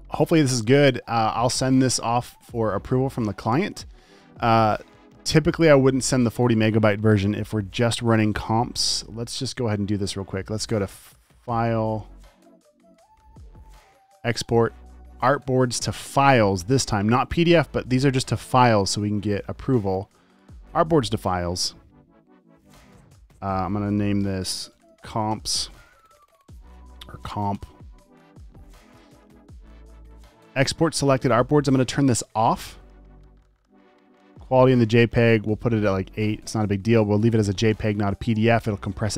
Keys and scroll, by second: 24.2-27.8 typing.